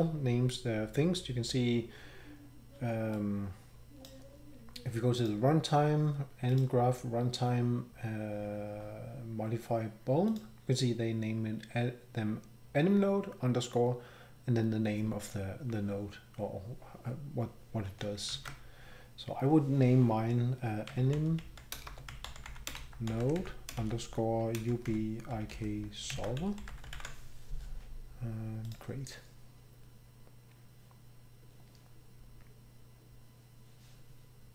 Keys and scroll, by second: 18.3 alt+Tab, 20.6-28.4 typing, 30.6-31.3 typing.